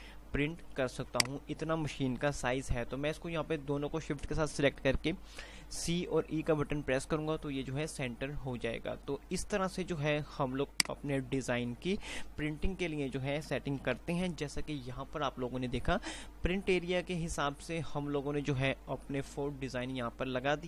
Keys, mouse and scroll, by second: 1.2 shift+Num_Lock, 1.3 shift+click, 10.3-14.0 drag, 14.0 F2, 14.0 F9.